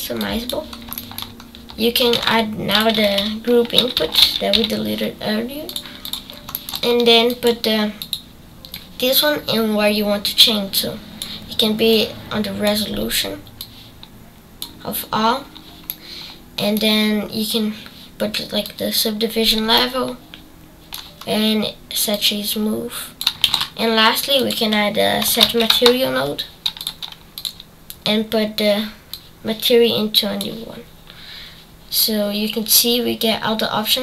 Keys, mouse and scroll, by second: 7.4 click, 8.7-11.8 drag, 12.6 click, 13.5-15.3 drag, 20.1-23.8 shift+middle drag, 23.8 shift+a, 31.0 click.